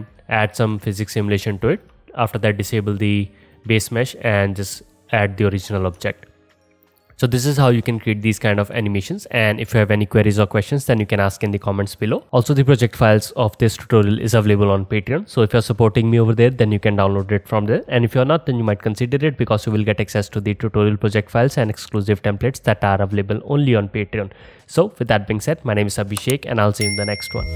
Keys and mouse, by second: 0.9-1.9 right drag, 2.0-3.1 right drag, 3.5 click, 3.5 middle click, 3.5 right click, 4.5-6.2 right drag, 6.2 drag, 6.3-6.8 alt+right drag, 6.8-7.3 alt+drag, 7.3 alt+right drag, 7.5-12.5 alt+drag.